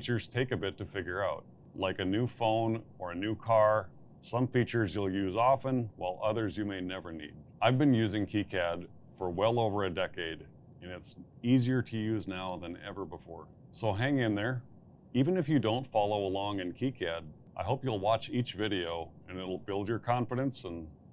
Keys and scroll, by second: 0.1 a, 0.7 BackSpace, 0.9 b, 1.1 z, 2.6 x, 2.9 ctrl+z, 4.8-5.8 typing.